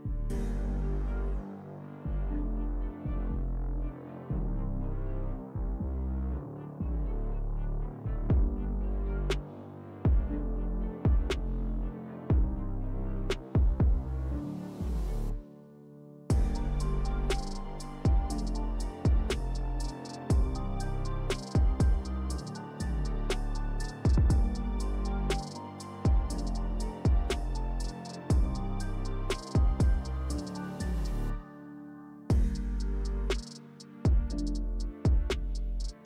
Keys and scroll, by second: 7.3 s, 9.6 3, 14.9 s, 21.5 s, 23.8 s, 29.5 s, 30.5 4, 33.3 s.